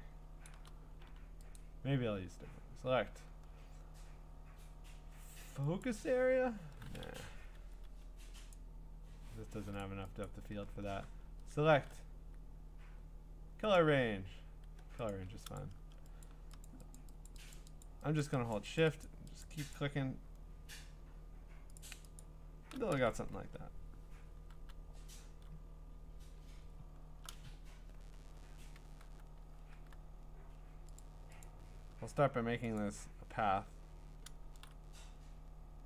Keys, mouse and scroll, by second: 0.5 click, 1.6 click, 5.8 click, 7.2 Escape, 7.5 Escape, 7.8 Escape, 8.5 click, 9.8 click, 10.3 click, 13.8 click, 15.1 click, 15.6 click, 16.3 click, 16.7 shift+click, 17.0 shift+click, 17.3 shift+click, 17.5 shift+click, 17.8 shift+click, 18.2 shift+click, 18.5 shift+click, 18.8 shift+click, 19.0 shift+click, 19.4 shift+click, 19.7 shift+click, 21.8 shift+click, 26.7-28.2 scroll, 26.7 typing, 28.2 scroll, 29.0-29.7 typing, 31.0 click, 31.0 q, 31.5 click, 32.8 click, 34.5 ctrl+z.